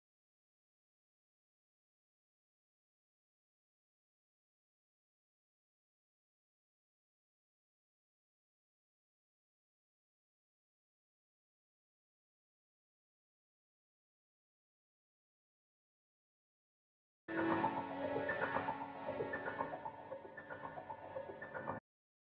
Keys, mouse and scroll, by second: 1.8 ctrl+j, 2.0 click, 2.4 scroll down 1, 2.6 scroll up 1, 2.8 click, 3.6 scroll up 1, 3.9 click, 4.3-4.7 scroll down 1, 4.7 click, 5.0 scroll up 1, 6.0 click, 8.0-8.4 scroll down 1, 8.5-8.9 scroll up 1, 8.9 scroll down 1, 9.7-10.5 scroll up 1, 11.2 scroll down 1, 11.5-13.3 right drag, 13.3 scroll up 1, 14.3 click, 17.1 scroll up 1, 17.4 scroll down 1, 18.2-19.8 drag, 19.8 click.